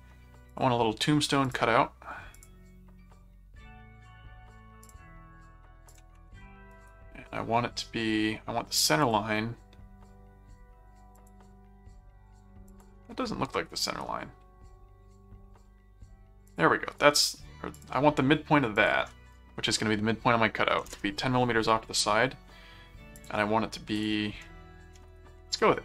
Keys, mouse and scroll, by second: 0.5 click, 1.4 click, 2.3 click, 4.8 click, 5.8 click, 6.7 right click, 9.0 click, 11.1 click, 12.6 click, 13.8 right click, 16.5 click, 17.7 click, 18.7 click, 23.1 click, 23.9 click.